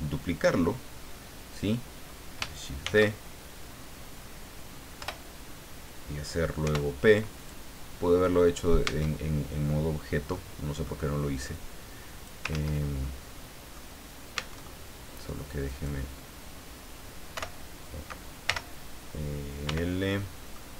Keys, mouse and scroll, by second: 2.8 shift+d, 5.0 Return, 6.6 p, 7.4 click, 8.8 Tab, 10.3 middle click, 11.5 click, 12.5 ctrl+z, 13.0 ctrl+middle click, 14.3 Tab, 15.7 right click, 17.3 o, 18.5 l, 19.7 l, 20.2 middle click, 20.2 click.